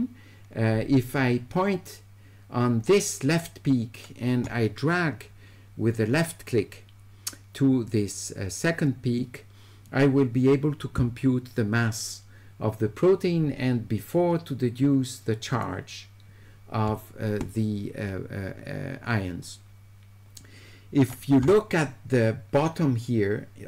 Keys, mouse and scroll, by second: 15.6-21.1 drag.